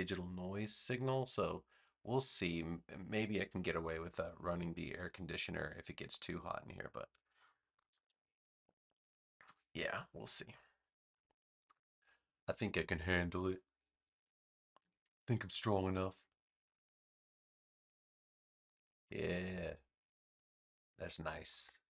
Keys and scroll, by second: 14.9 super+z, 20.8 space.